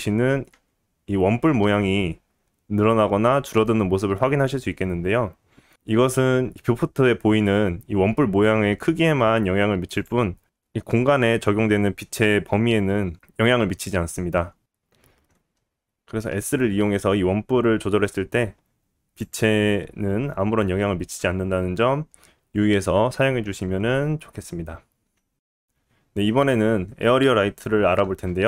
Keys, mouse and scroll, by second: 0.5 s, 6.6 s, 13.3-13.8 scroll up 1, 13.8 scroll up 1, 14.4 scroll up 2, 15.0 scroll down 1, 16.9-17.5 scroll down 2, 20.7 s.